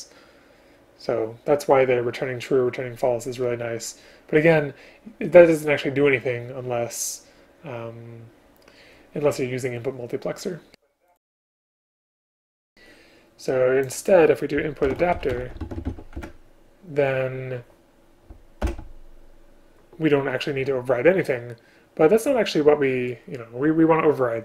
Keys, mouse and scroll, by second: 16.3 Return.